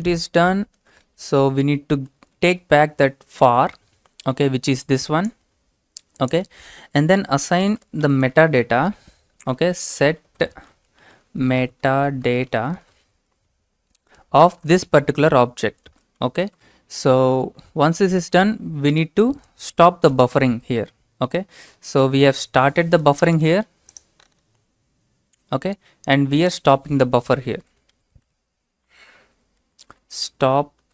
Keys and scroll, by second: 0.8-3.3 typing, 4.8-5.6 typing, 7.7 typing, 9.1-17.1 typing, 18.9 Return, 20.1 typing, 21.3-22.6 typing, 27.6-28.0 typing, 29.2-30.9 typing.